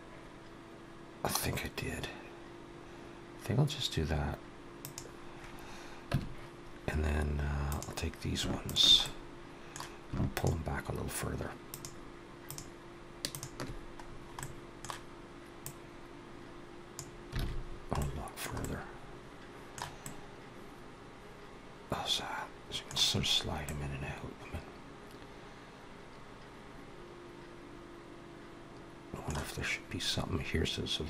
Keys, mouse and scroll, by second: 5.9 Tab, 7.5 click, 8.5 shift+click, 8.9 middle click, 10.2 shift+click, 11.5 shift+click, 12.3 shift+click, 13.4 shift+click, 13.9-14.2 scroll down 3, 14.2 middle click, 15.5 click, 17.2 alt+a, 17.5-17.8 scroll down 3, 17.8 middle click, 18.4 middle click, 20.5 middle click, 23.5 middle click.